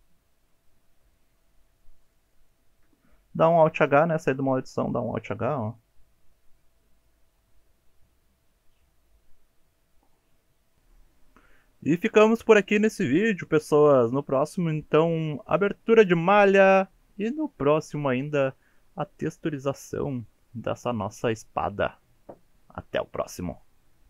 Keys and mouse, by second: 0.0 middle click, 1.1 shift+drag, 1.7 shift+drag, 2.0 shift+click, 2.3 shift+drag, 3.7 alt+h, 4.8-10.8 drag, 11.0 shift+middle drag, 11.4-12.9 middle drag, 13.7 KP_3, 14.3 KP_1, 15.6-16.4 shift+middle drag.